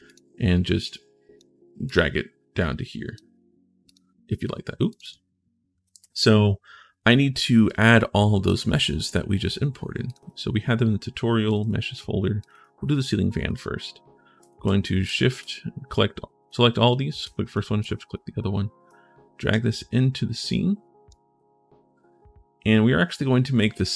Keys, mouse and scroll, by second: 0.7 click, 1.6-2.9 drag, 3.6 click, 4.7 click, 7.4 right click, 9.8 click, 11.2 click, 12.2 click, 14.2 click, 14.8 shift+click, 15.7 click, 16.6 click, 17.3 shift+click, 18.6 click, 19.8-20.8 drag.